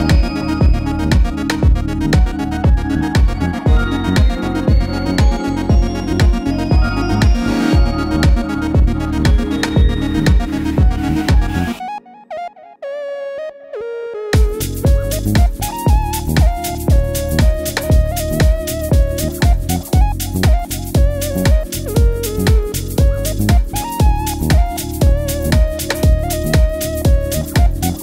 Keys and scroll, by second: 5.3 Left, 18.2 super+c, 18.3 super+v, 19.4 super+z, 19.7 super+z, 20.3 super+v, 21.4 d.